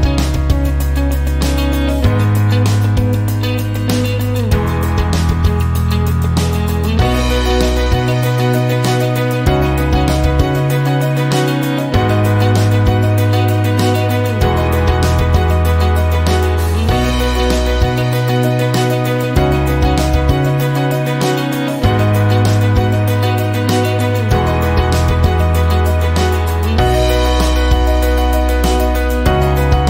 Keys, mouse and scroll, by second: 2.5 click, 4.2 click, 5.7 click, 7.5 click, 8.2 click, 10.0 right click, 11.2 click, 13.8 click, 14.7 click, 15.5-15.8 scroll down 1, 16.2 click, 17.0 click, 18.1 click, 19.2 click, 20.2 click, 21.4 click, 22.8 KP_0, 23.0 KP_Decimal, 23.2 KP_5, 23.7 KP_Enter, 25.4 click, 27.5 click, 29.4 click.